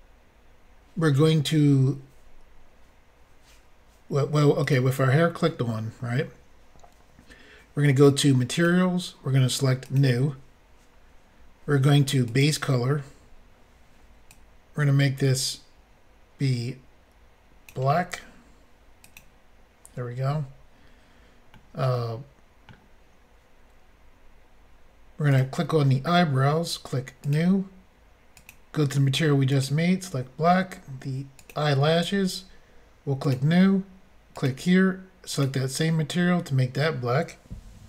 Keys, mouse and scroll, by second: 4.6 click, 4.7 click, 8.5 click, 8.6 click, 9.8 click, 10.0 click, 12.3 click, 12.4 click, 14.3 click, 19.2 click, 21.6 middle click, 24.3 scroll up 1, 25.3 click, 27.2 click, 28.4 click, 29.5 click, 31.4 click, 31.5 click, 33.3 click, 33.3 click, 34.4 click, 34.4 click, 35.3 click, 35.4 click.